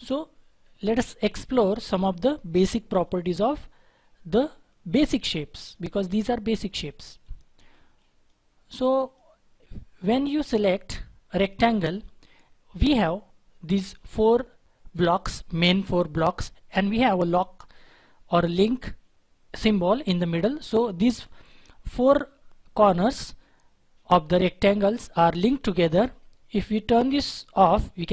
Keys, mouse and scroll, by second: 6.0 double click.